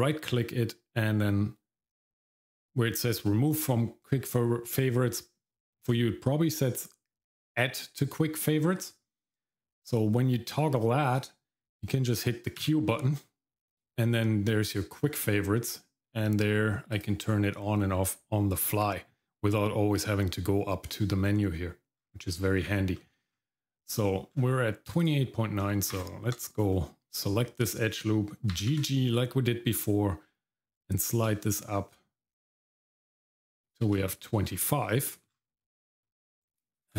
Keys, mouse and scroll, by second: 12.6 q, 18.8-19.4 scroll up 2, 21.5-22.0 scroll up 1, 22.0 scroll down 1, 22.3-23.0 scroll up 2, 23.0 middle click, 23.3-23.9 scroll up 1, 23.9-24.3 scroll up 2, 24.3-24.7 scroll down 1, 25.0 click, 25.9 alt+click, 28.5 g, 34.4-34.9 scroll down 2, 34.9 middle click, 35.3-35.6 scroll down 2, 35.6 middle click, 36.0-36.5 scroll up 1, 36.8 alt+click.